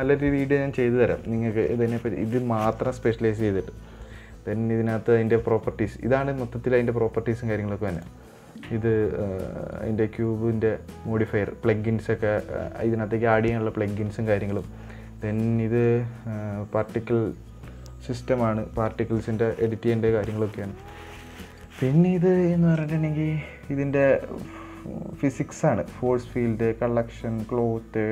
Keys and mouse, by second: 8.3 click, 15.0 click, 21.2 click, 21.8 click.